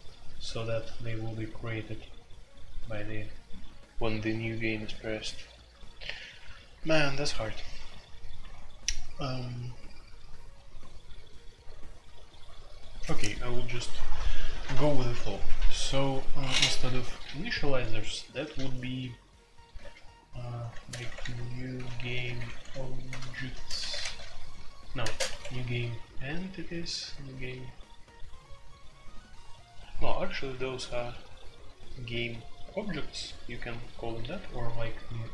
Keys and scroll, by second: 19.7-25.9 typing.